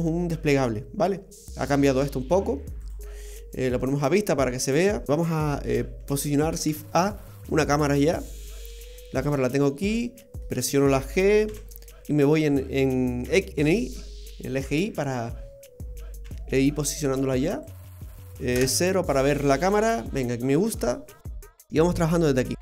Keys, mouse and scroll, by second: 5.0 click, 6.6 shift+a, 9.3 middle click, 11.4 g, 14.9-16.2 scroll down 4, 16.2 g, 18.5 KP_0, 19.4-19.7 scroll up 3, 19.8-20.8 scroll down 1, 20.8 scroll down 2, 21.4 right click.